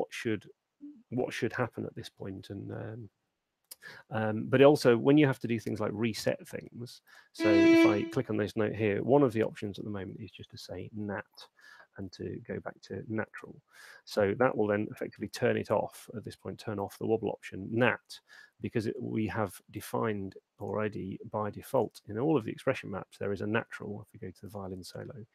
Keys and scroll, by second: 9.5 shift+p, 10.2 a.